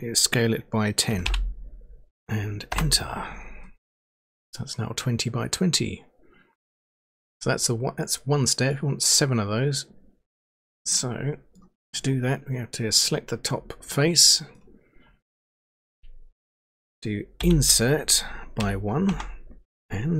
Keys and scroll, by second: 1.0-1.7 typing, 2.7 Return, 18.6 1, 19.1 Return.